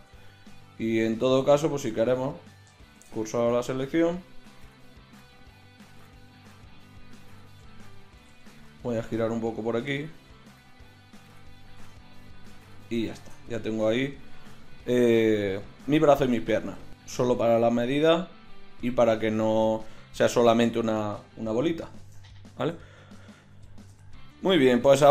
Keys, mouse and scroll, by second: 1.4 Tab, 3.0 shift+s, 5.1-9.0 right drag, 5.8 l, 8.2 r, 9.2 right click, 11.8 Tab, 12.7 KP_1, 16.4-21.0 drag, 21.6 KP_3, 23.5 KP_1.